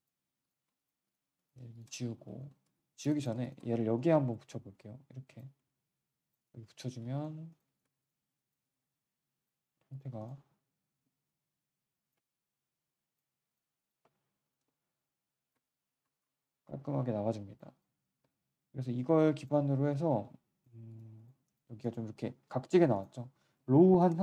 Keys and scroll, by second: 0.9 q, 2.6 z, 5.6 z, 7.0 q, 10.5 alt+w, 15.8 3, 18.1 1.